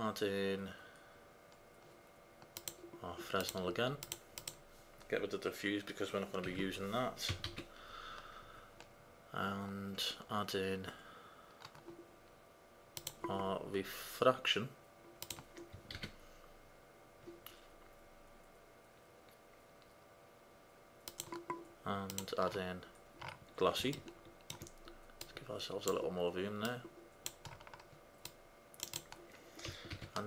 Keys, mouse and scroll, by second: 4.5 click, 6.6 Delete, 7.5 shift+a, 16.0 shift+a, 25.4 middle click, 25.5-30.2 drag, 30.1 shift+a.